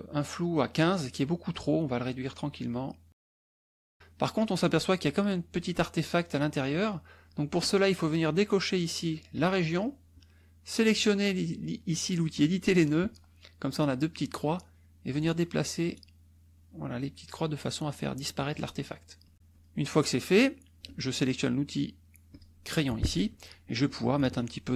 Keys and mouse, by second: 1.9 click, 2.5-3.9 drag, 7.6 click, 9.3 click, 14.3 click, 15.8-17.4 drag, 19.2 click, 19.5-22.6 drag, 24.5 shift+click.